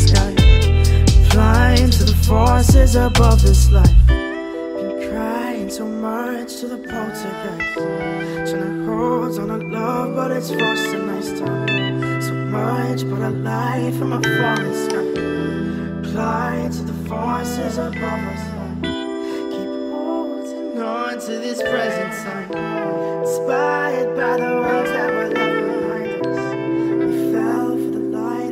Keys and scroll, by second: 24.2 ctrl+shift+].